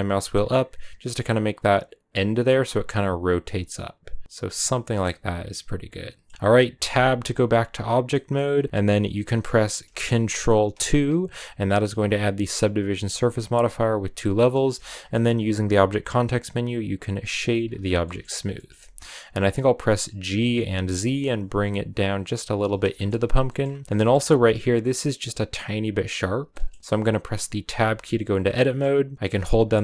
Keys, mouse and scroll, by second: 4.7 scroll down 4, 4.9-6.7 middle drag, 6.7 Tab, 8.1-10.6 middle drag, 10.6 ctrl+2, 14.2 middle click, 14.3 scroll up 2, 14.6 shift+middle click, 15.6 w, 17.4 scroll down 3, 17.9 middle click, 18.0 scroll up 1, 18.3 shift+middle click, 18.6-19.2 shift+scroll up 3, 20.1 g, 22.5 a, 22.7 shift+middle click, 23.0 right click, 23.3 middle click, 23.4-25.5 scroll up 5, 23.8 shift+middle click, 25.5 scroll down 1, 26.9 middle click, 27.4 Tab, 28.5-29.8 middle drag.